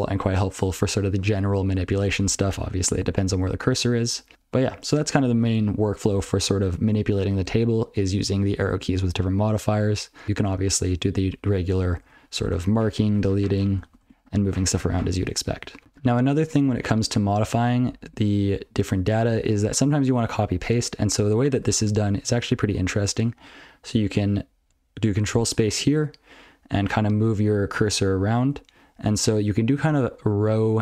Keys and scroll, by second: 0.2 ctrl+f, 2.8 alt+shift+Right, 3.4 alt+shift+Left, 4.1 alt+shift+Right, 4.3 alt+shift+Right, 4.3 ctrl+/, 4.4 ctrl+/, 12.0 ctrl+alt+f, 12.3 ctrl+alt+b, 12.5 ctrl+alt+space, 12.8 ctrl+w, 13.0 ctrl+n, 13.4 ctrl+y, 13.8 ctrl+alt+space, 14.0 ctrl+w, 14.2 ctrl+alt+space, 14.3 ctrl+b, 14.5 ctrl+b, 14.7 ctrl+b, 14.8 ctrl+y, 15.8 ctrl+l, 17.1 ctrl+n, 17.4 ctrl+n, 17.7 ctrl+p, 17.9 ctrl+p, 19.7 ctrl+n, 20.3 ctrl+n, 20.8 ctrl+p, 21.2 ctrl+p, 21.6 ctrl+n, 21.8 ctrl+n, 22.0 ctrl+a, 22.2 ctrl+f, 22.5 ctrl+a, 24.6 ctrl+f, 24.7 ctrl+space, 25.0-25.3 ctrl+f, 25.5 ctrl+f, 25.7 ctrl+f, 25.7 ctrl+f, 25.9-26.7 ctrl+f, 26.9 ctrl+n, 27.2-27.7 ctrl+f, 27.9 ctrl+f, 28.2 ctrl+b, 28.4 ctrl+b.